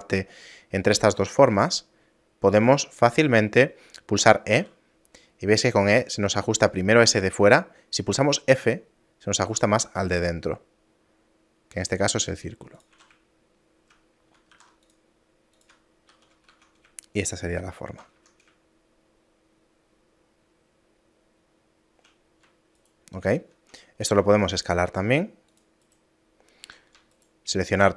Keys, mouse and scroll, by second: 13.0 a, 13.4 shift+middle click, 14.6 ctrl+r, 16.1 ctrl+2, 16.6 Tab, 17.2 shift+middle click, 18.2 Tab, 18.7 shift+middle click, 22.8 alt+right click, 24.1 s, 25.9 right click, 26.7 a, 27.2 alt+right click.